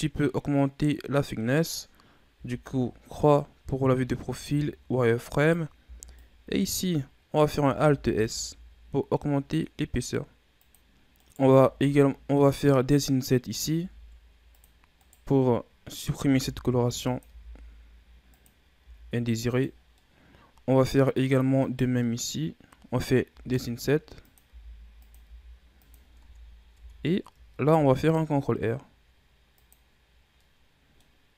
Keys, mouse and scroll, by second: 2.2 KP_3, 4.1 z, 5.2 right click, 5.7 b, 7.6 alt+s, 10.7 scroll up 1, 11.0 right click, 11.4 Tab, 11.9 middle click, 12.4 scroll up 2, 13.6 ctrl+Tab, 14.9 right click, 16.2 i, 17.1 i, 18.7 i, 19.6 scroll down 2, 19.8-21.0 middle drag, 21.0-21.6 scroll up 1, 21.6 right click, 21.9 middle click, 22.3-23.2 scroll up 1, 23.2 i, 24.3 i, 26.1 Tab, 26.6 Tab, 27.6 ctrl+r, 29.8-30.3 scroll down 1, 30.3-31.3 middle drag.